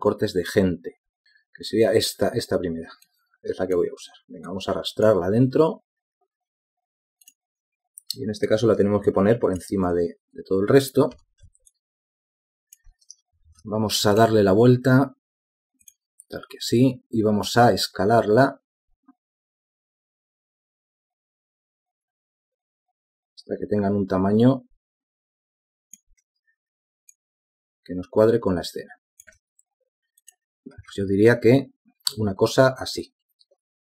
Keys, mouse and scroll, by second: 12.4 v, 14.7 ctrl+t, 18.7 shift+click, 28.4 shift+click.